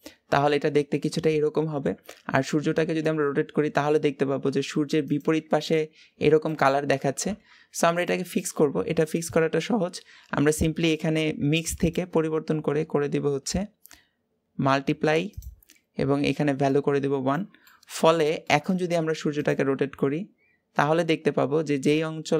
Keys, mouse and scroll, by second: 0.8-2.3 middle drag, 2.3 click, 2.6 r, 7.0 r, 8.0 click, 16.6-17.4 drag, 17.4-19.4 middle drag, 19.4 click, 19.6 r.